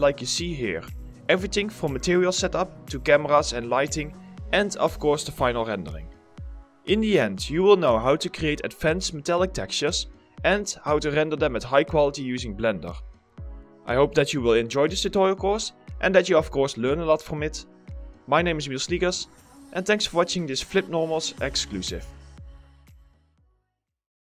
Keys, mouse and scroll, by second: 0.4-1.2 typing, 4.2 scroll down 1, 9.0 scroll down 1, 9.2-9.7 scroll up 2, 9.4 middle click, 9.7 middle click, 12.0 scroll up 1, 12.2 middle click, 12.6 scroll down 1, 12.8 middle click, 13.1-13.4 scroll up 2, 13.3 middle click, 14.2 middle click, 15.2 scroll down 1, 15.3 middle click, 15.5 scroll up 1, 15.6 middle click.